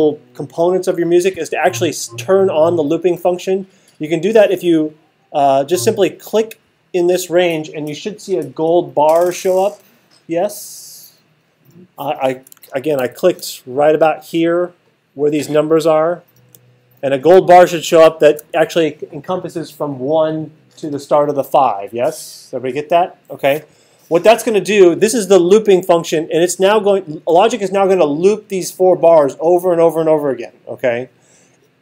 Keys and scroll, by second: 13.0 alt+super+8.